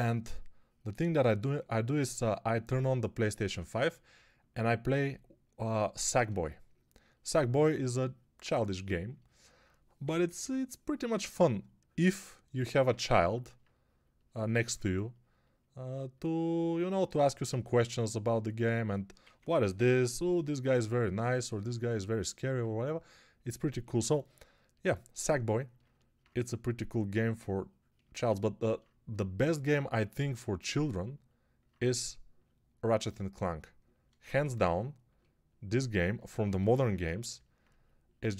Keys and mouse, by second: 10.3 [, 14.5 2, 17.0 1, 19.1 1, 19.6 [, 19.8 [.